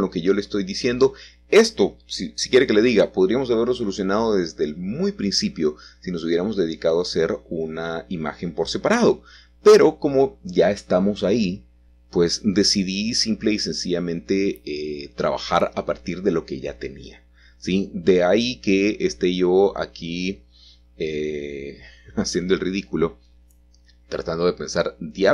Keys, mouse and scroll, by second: 2.1 click, 3.6 click, 5.6-7.9 middle drag, 7.7 ctrl+z, 7.9 ctrl+z, 8.2 ctrl+z, 8.5 ctrl+z, 8.8 ctrl+z, 9.5 ctrl+z, 9.8 ctrl+z, 10.0 ctrl+z, 10.4 ctrl+z, 10.8 ctrl+z, 11.1 ctrl+z, 13.5 click, 14.8 Tab, 16.1 a, 16.2 a, 16.9 Tab, 18.1 alt+shift+click, 20.8 alt+shift+click, 21.7-23.2 alt+shift+drag, 24.3-25.3 scroll up 3.